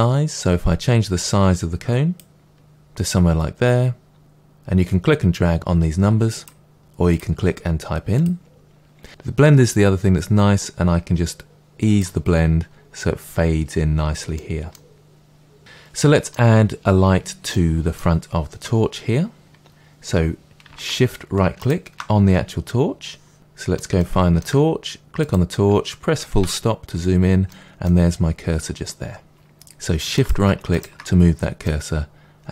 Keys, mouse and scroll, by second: 9.0-14.3 drag, 14.3-21.6 middle drag, 21.6-23.3 shift+right drag, 23.3-25.1 middle drag, 25.1 click, 26.3 KP_Decimal, 27.1-27.4 scroll down 1, 27.4-30.1 middle drag, 30.1 shift+right click, 30.7 shift+right drag, 31.6-32.5 middle drag.